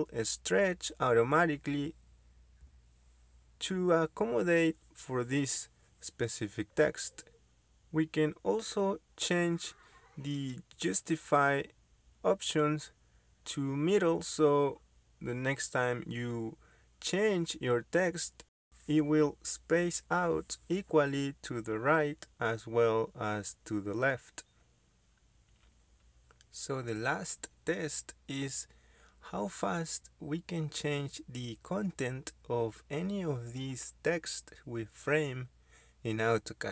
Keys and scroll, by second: 0.6-1.4 typing, 3.8-4.7 typing, 11.0 Escape, 21.4 Escape, 25.0-25.9 typing, 27.5 Down, 28.0 Left, 28.5 BackSpace, 29.7-30.4 typing.